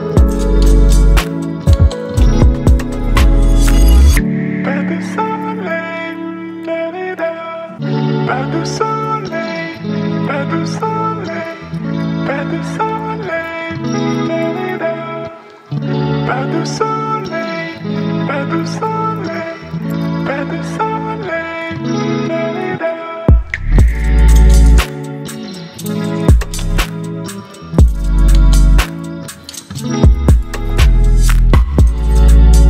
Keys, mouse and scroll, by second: 1.0-2.5 drag, 16.1 right click, 17.6-19.2 drag, 24.5-25.4 drag.